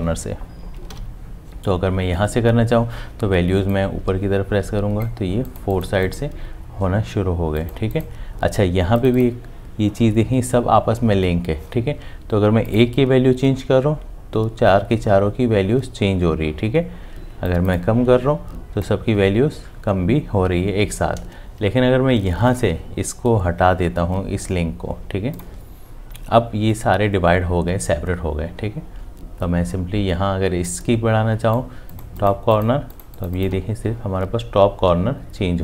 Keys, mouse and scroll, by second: 0.9 ctrl+z.